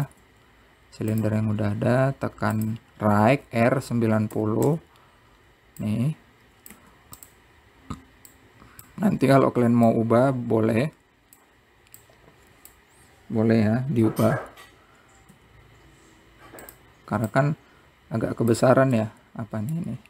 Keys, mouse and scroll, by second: 0.0 click, 1.0 shift+d, 4.7 r, 7.0 click, 9.6 click, 10.4 scroll up 3, 11.2-13.3 drag, 15.5-16.6 scroll up 2, 16.6 s, 18.5 click.